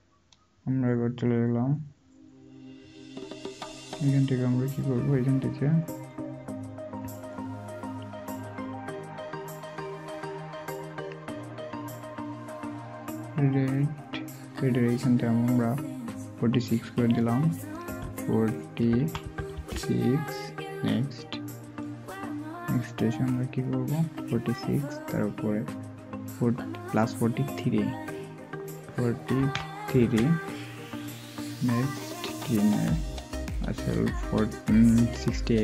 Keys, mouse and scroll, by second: 18.9-19.5 typing, 30.0 typing.